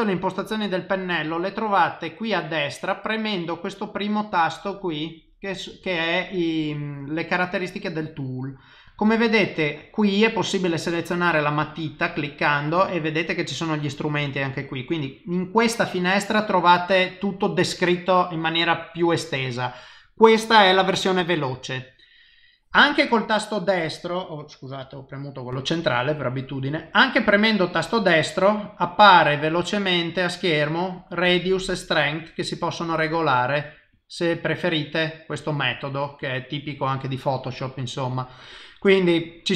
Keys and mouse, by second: 3.3 click, 11.7 click, 13.9 click, 22.9 middle click, 24.1 middle click, 24.8 KP_0, 25.6 right click, 32.1 click, 33.3 right click, 36.2 click.